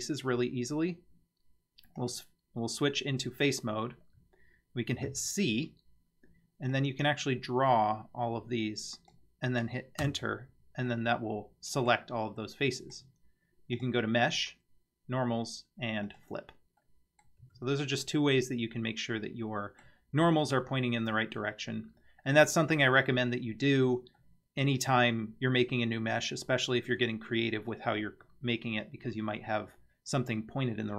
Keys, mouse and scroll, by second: 2.0 click, 5.2 c, 10.9-11.9 middle drag, 12.4-13.0 middle drag, 13.8-16.2 drag, 16.8-17.2 middle drag, 17.4 Tab, 17.9 scroll down 2, 18.4-19.9 middle drag, 24.2-24.6 middle drag.